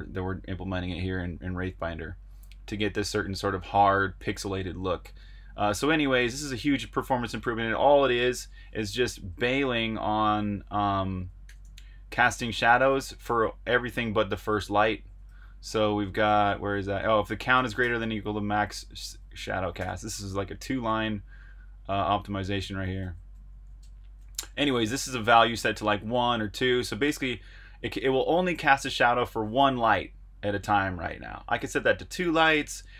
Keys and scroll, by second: 7.3 super+Tab, 9.1 Escape, 9.3-9.7 j, 11.4-13.2 typing, 15.2-20.3 typing, 21.9-23.7 typing, 24.8 shift+v, 28.0 Escape.